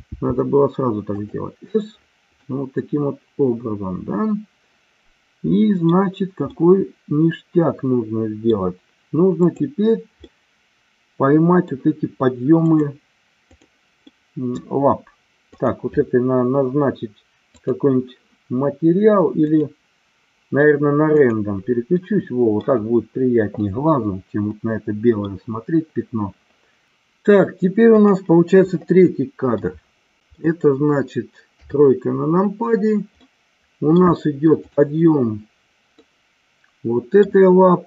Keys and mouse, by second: 0.1 s, 1.1 click, 2.4-6.1 middle drag, 6.4-8.4 middle drag, 9.4 click, 10.3-11.7 middle drag, 12.7 click, 14.2 middle click, 15.5 click, 17.7 click, 19.4-21.7 drag, 22.0 middle click, 24.4 middle click, 27.8 click, 29.6-30.3 middle drag, 31.5 KP_3, 33.2-34.1 middle drag, 34.6-35.5 drag, 36.0-37.4 middle drag.